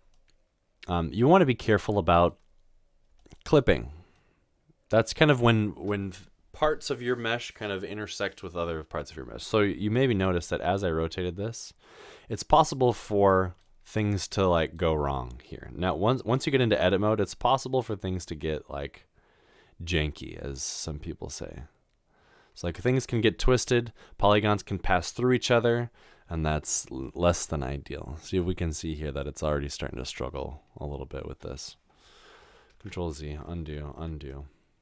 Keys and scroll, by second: 10.2 r, 32.8 ctrl+z, 33.6 ctrl+z.